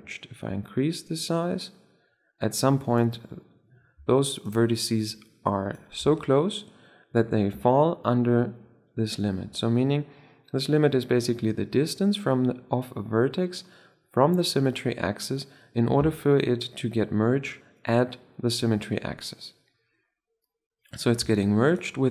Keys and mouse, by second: 3.3-4.3 middle drag, 3.9 Tab, 4.3-5.9 right drag, 5.0 click, 5.9 Tab, 6.3-6.9 drag, 6.9 middle click, 12.4-14.8 middle drag, 15.0-16.5 middle drag, 17.7-19.8 middle drag, 21.1 Tab, 21.6 click, 21.9-22.1 right drag.